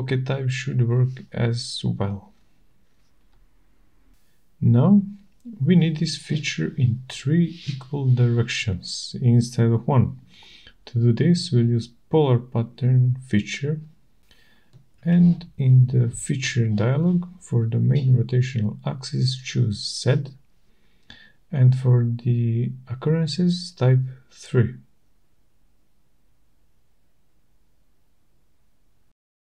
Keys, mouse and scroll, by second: 1.1 scroll, 1.2-1.9 typing, 2.8 shift+right click, 4.9 click, 4.9 middle click, 6.2 click, 13.1 click, 17.2 shift+right click, 21.1 click, 24.9 click.